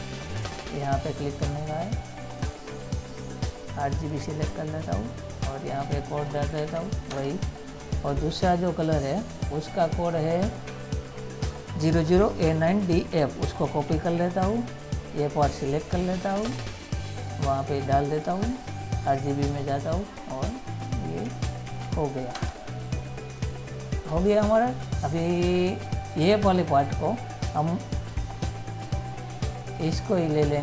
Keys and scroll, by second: 6.9 ctrl+v, 14.0 ctrl+c, 22.0 ctrl+v.